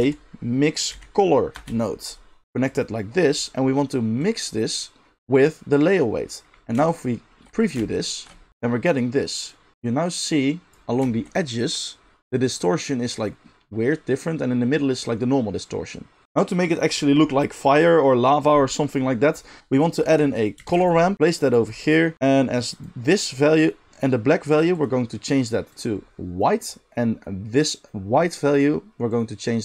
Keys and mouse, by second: 1.6-4.1 middle drag, 4.1-7.0 drag, 7.0 alt+shift+middle click, 7.9 ctrl+shift+click, 8.1-9.4 ctrl+shift+middle drag, 9.4-20.5 drag, 20.2 g, 20.5-22.7 shift+middle drag, 20.7 shift+a, 22.7-24.8 drag, 24.8-27.6 middle drag, 27.6-29.3 drag, 29.3-29.6 middle drag.